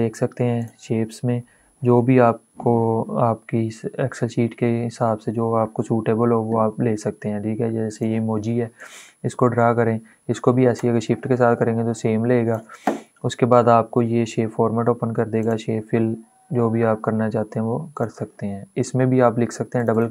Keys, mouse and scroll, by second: 1.9-3.9 scroll down 1, 4.5 scroll up 1, 7.7-15.1 drag.